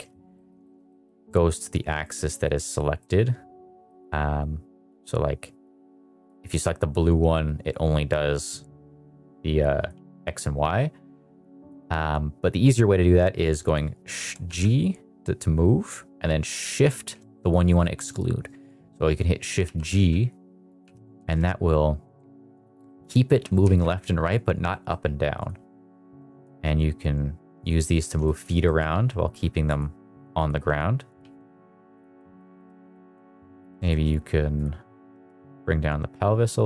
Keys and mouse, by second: 0.2 middle drag, 0.5 shift+middle drag, 0.8 middle drag, 1.9-2.5 middle drag, 2.9-3.8 middle drag, 4.9 click, 5.2 click, 7.1 click, 10.7 click, 10.9 click, 14.4 g, 16.7 shift+z, 19.4 click, 19.5 r, 19.8 z, 20.7 click, 20.8 g, 21.1 shift+z, 22.5 click, 22.8 middle click, 23.3 g, 23.6 shift+z, 24.6 middle click, 26.0 g, 26.4 shift+z, 27.5 drag, 28.1 shift+middle click, 28.5 middle click, 28.8 g, 29.6 click, 30.4 g, 31.0 click, 31.2 g, 32.1 middle drag, 32.5 shift+middle click, 32.8 middle drag, 33.5 click, 33.8 shift+middle drag, 34.5 drag, 34.9 g, 35.2 z.